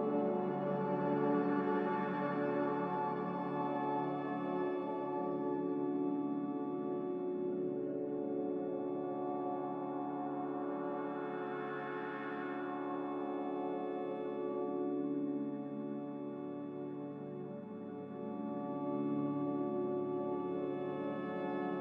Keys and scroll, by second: 13.4 n.